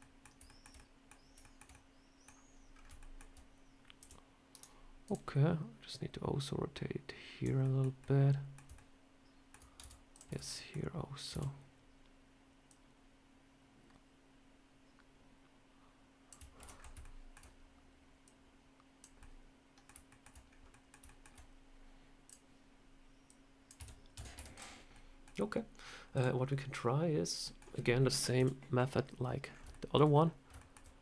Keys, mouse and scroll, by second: 0.3 shift+middle click, 0.6 middle click, 1.3 shift+middle click, 1.6 middle click, 2.6 scroll down 3, 2.9 shift+middle click, 3.9 r, 4.9 click, 5.8 click, 7.5 middle click, 7.9 middle click, 8.6 shift+middle click, 8.7 shift+middle click, 9.7 Tab, 10.0 click, 10.2 Tab, 10.3 middle click, 11.2 a, 12.5 click, 16.4 ctrl+t, 16.6 scroll up 3, 16.9 shift+middle click, 18.1 click, 19.0 middle click, 19.9 middle click, 20.3 scroll down 2, 20.5 middle click, 20.9 shift+middle click, 22.1 click, 23.1 click, 23.6 Tab, 24.0 Tab, 24.2 Tab, 24.4 click, 24.8 middle click, 25.2 scroll down 1, 26.0 click, 26.3 middle click, 26.7 scroll down 1, 27.2-27.5 scroll up 2, 27.3 middle click, 28.2 KP_7, 29.3 scroll up 3, 29.6 shift+middle click, 29.9 scroll down 3, 30.4 shift+middle click, 30.8 scroll up 2.